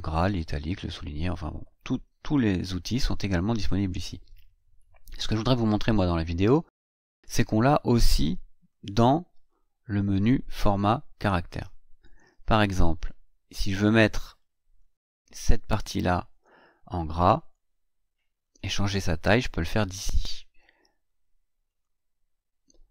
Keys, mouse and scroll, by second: 7.1 click, 7.8 click, 10.6 click, 12.0 click, 13.9-15.0 drag, 17.4 click, 18.4 click, 21.6 click.